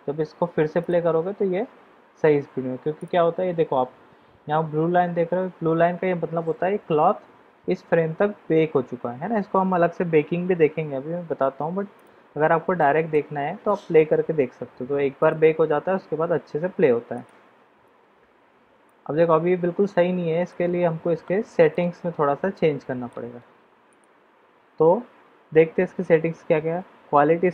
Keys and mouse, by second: 0.8 click, 11.9 click, 12.7-13.1 middle drag, 13.7 middle click, 15.1 click, 17.1 click, 18.8-20.5 middle drag, 21.6 click, 22.5 middle click, 23.9 click.